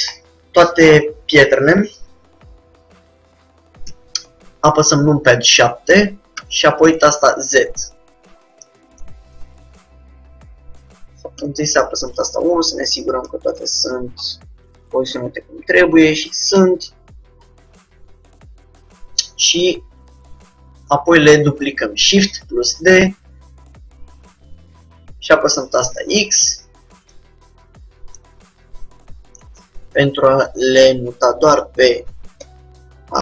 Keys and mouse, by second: 2.3-4.2 middle drag, 4.2 KP_7, 6.6 z, 8.7-10.8 middle drag, 11.5 KP_1, 13.0 middle click, 15.1 middle click, 16.6 middle click, 16.7 KP_7, 21.8 shift+d, 27.5-30.0 drag, 28.6 middle click, 28.6 right click, 30.4 middle click, 30.6-32.4 drag, 32.6 KP_1.